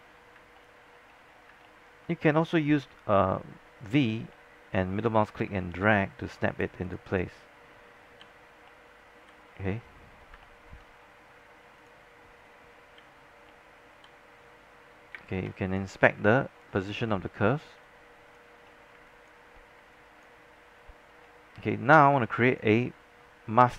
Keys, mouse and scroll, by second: 0.7 alt+middle click, 1.2-1.7 scroll up 2, 2.9-3.8 alt+v, 4.4 middle click, 5.3 scroll down 1, 5.6 alt+middle click, 6.2 scroll up 1, 6.9 click, 8.3 v, 8.8 middle click, 9.6-10.4 scroll down 1, 10.4 alt+middle click, 11.0 scroll up 1, 11.9-12.9 drag, 13.1 v, 13.6 middle click, 14.0 middle click, 14.5-15.2 scroll down 2, 15.2 space, 15.4 click, 16.3 alt+click, 16.9 scroll down 1, 17.2 alt+middle click, 17.6 scroll up 1, 17.8 alt+click, 18.7 scroll up 1, 19.2 alt+click, 19.6 scroll down 1, 19.9 alt+click, 20.9 scroll down 1, 21.2-22.1 scroll up 1, 22.1 scroll down 1, 22.2 alt+click, 22.9 scroll up 1.